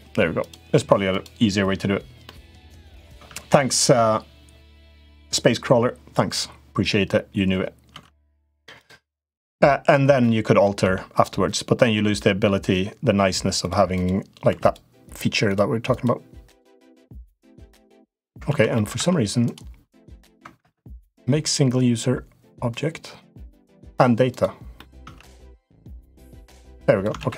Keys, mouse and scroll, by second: 0.2 click, 2.0 middle click, 2.9 Tab, 7.7 Tab, 10.0 middle click, 10.6 Tab, 10.9 click, 11.9 middle click, 13.7 click, 14.3 3, 14.3 click, 15.7 click, 16.2 click, 17.5 click, 18.2 ctrl+z, 18.5 middle click, 18.7 Tab, 19.3-20.3 right drag, 20.3 F3, 24.8 Tab, 25.1 click, 25.4 middle click, 26.0 click, 26.9 ctrl+z.